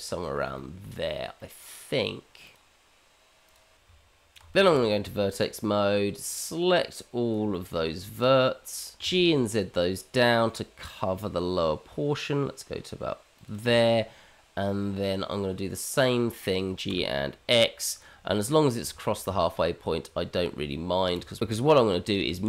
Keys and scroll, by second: 3.8 Tab, 4.7 shift+z, 9.3 g, 16.6 g, 19.1 g, 21.0 shift+Tab, 21.1 shift+z, 22.3 alt+x.